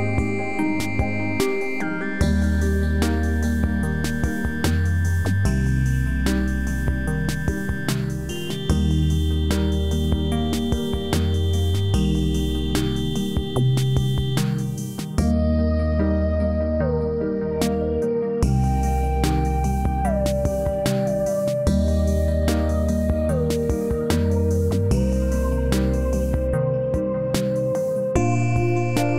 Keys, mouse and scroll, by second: 2.0 click, 2.5 scroll up 1, 4.1 click, 8.4-8.9 scroll down 1, 10.5 scroll down 1, 11.0-11.7 alt+middle drag, 12.0 scroll up 1, 13.5-14.1 alt+middle drag, 18.2-24.2 drag.